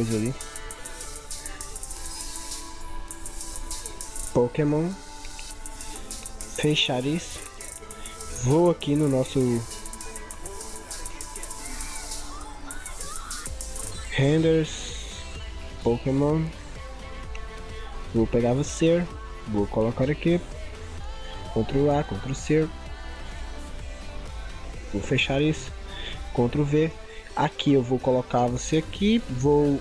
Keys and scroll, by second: 21.7 ctrl+a, 22.1 ctrl+c, 26.3 ctrl+v.